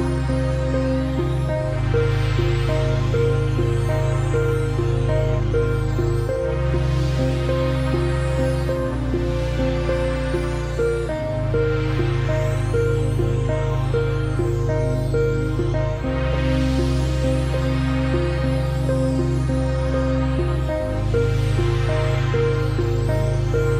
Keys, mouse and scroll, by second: 0.5 click, 1.0 click, 3.0 scroll down 1, 3.5 click, 3.6 space, 3.9-4.9 alt+scroll up 3, 4.1 click, 4.5 space, 4.6 click, 5.1 click, 7.0 d, 10.6 click, 13.7 click, 15.8 ctrl+shift+o, 16.3 ctrl+shift+g, 16.9 x, 17.8 click.